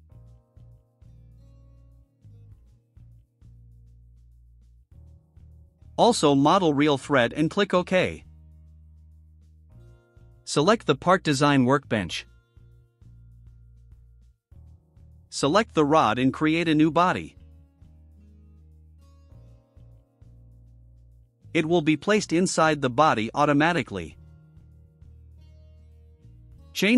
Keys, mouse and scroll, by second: 0.4 middle click, 0.8 middle click, 1.1 middle click, 3.7 1, 4.3 0, 5.5 click, 5.7 click, 6.8 click, 7.8 click, 11.0 click, 12.0 click, 13.3 scroll down 1, 15.1 click, 20.0 click, 23.2 click, 25.9 click.